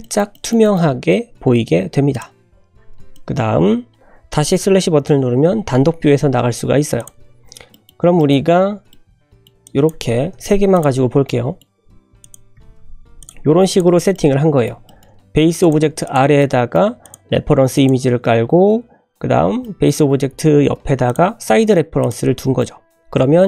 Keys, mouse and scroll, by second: 0.0 shift+middle click, 0.3 shift+middle click, 0.9 scroll up 2, 1.3-1.8 scroll down 2, 2.1 click, 3.1 scroll down 1, 3.1-4.0 middle drag, 5.4 /, 6.5 scroll down 2, 6.9 click, 7.7 shift+middle click, 8.2 shift+middle click, 8.5 scroll up 2, 8.9-9.3 middle drag, 9.3 click, 9.6 click, 10.3 /, 10.7 click, 10.9 scroll up 1, 11.2-11.6 middle drag, 11.6 scroll up 1, 12.2 click, 12.5 g, 13.7 click, 14.1-14.6 middle drag, 14.8 shift+middle drag, 15.1 scroll up 2, 15.6 click, 16.0 click, 16.4 middle click, 17.0 click, 17.7 click, 19.6 middle click, 21.0 click, 22.0 click, 22.5-23.0 middle drag.